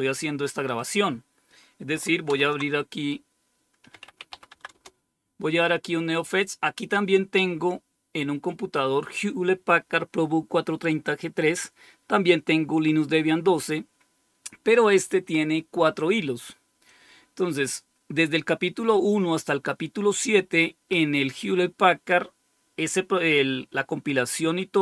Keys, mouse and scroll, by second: 0.7 click, 2.2 super+Return, 3.6-4.7 typing, 16.8 click.